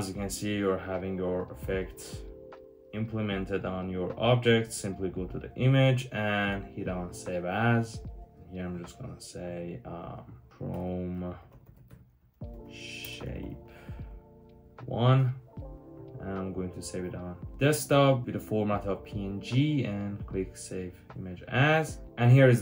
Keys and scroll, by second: 1.2 super+-, 10.5-15.5 typing, 16.7-17.4 typing, 21.5-22.3 typing.